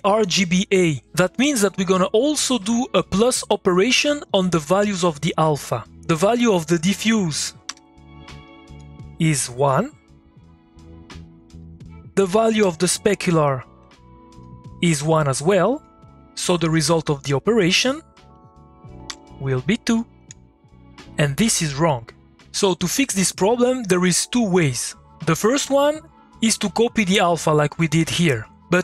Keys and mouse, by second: 7.7 2, 8.4 ctrl+click, 11.6 click, 12.6 2, 13.8 2, 13.9-18.3 ctrl+drag, 19.1 2, 19.9 click, 26.6 middle click, 26.7 click, 26.9 middle click.